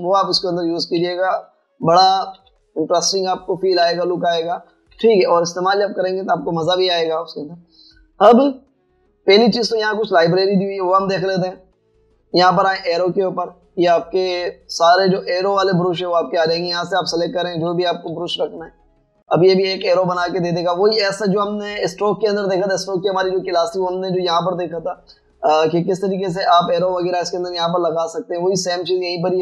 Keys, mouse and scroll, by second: 0.7-2.0 typing, 3.4 typing, 5.0-6.0 typing, 17.0 scroll down 1, 17.2 typing, 19.1 typing, 20.8 typing, 28.9 scroll up 1, 29.1 scroll down 1.